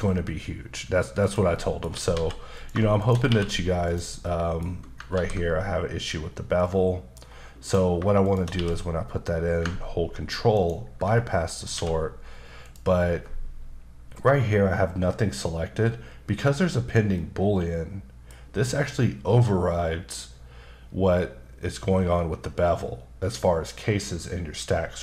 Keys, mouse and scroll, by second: 1.2 click, 1.5 middle click, 1.9 typing, 2.5 click, 3.0 shift+click, 3.3 q, 3.8 click, 4.2 middle click, 5.2 ctrl+z, 6.6 middle click, 7.2-7.6 scroll up 1, 7.6 click, 8.2 shift+click, 8.5 q, 10.5 ctrl+click, 11.1 middle click, 11.8 q, 12.6 click, 15.7-17.2 scroll down 1, 17.2 middle click.